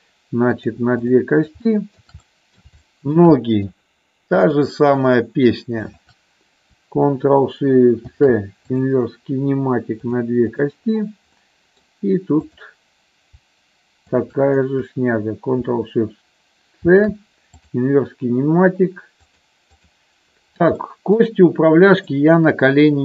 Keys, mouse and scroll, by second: 0.9 click, 1.7 shift+middle click, 2.2 middle click, 2.8 shift+middle click, 3.3 middle click, 4.3-5.4 drag, 5.8 shift+click, 7.9 ctrl+shift+c, 9.9 click, 10.5 click, 11.3 middle click, 12.4-13.5 drag, 14.0 shift+click, 16.9 ctrl+shift+c, 20.8 middle click, 22.0-23.0 middle drag.